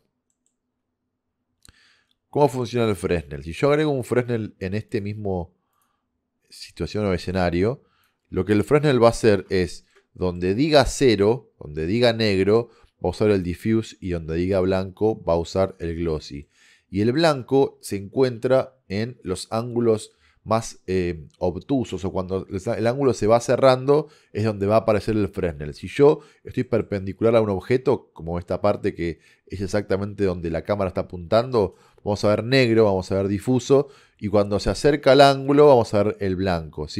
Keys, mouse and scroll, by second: 2.4 middle click, 2.8 click, 3.0 shift+a, 8.5 click, 9.9 middle click, 10.2-11.9 drag, 13.6-15.2 middle drag, 19.8 middle click, 20.1-22.7 middle drag, 25.8-26.7 middle drag, 27.2-28.5 middle drag.